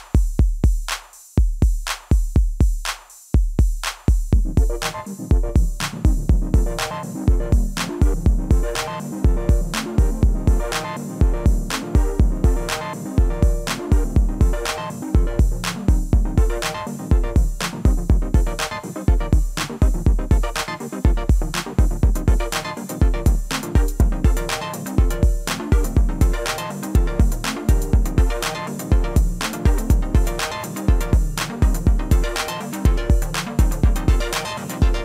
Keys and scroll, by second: 3.3-4.1 typing, 4.4 Return, 8.5 ctrl+a, 16.4-17.2 typing, 17.6 Return, 19.4-20.1 typing, 20.8 ctrl+a, 31.1 ctrl+a, 34.3-35.0 typing.